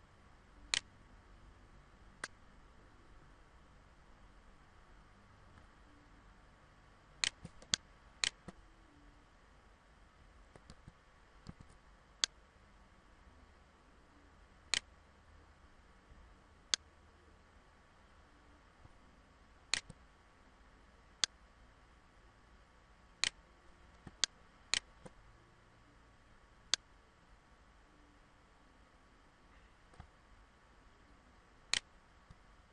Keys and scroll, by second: 10.3 ctrl+z, 12.3 ctrl+z.